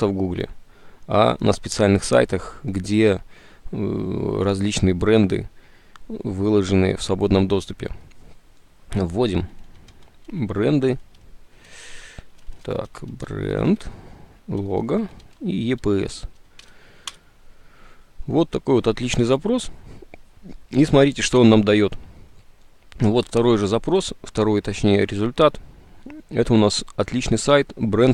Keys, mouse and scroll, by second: 9.6-16.4 typing, 17.2 Return, 20.1 Return, 20.1 s.